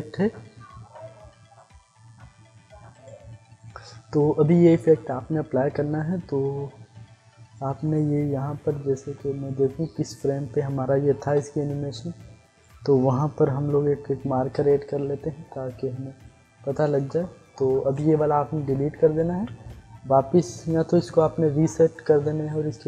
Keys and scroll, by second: 8.6 ctrl+z, 11.3 u, 14.6 *, 16.9 *, 19.3 Delete, 20.8 ctrl+z.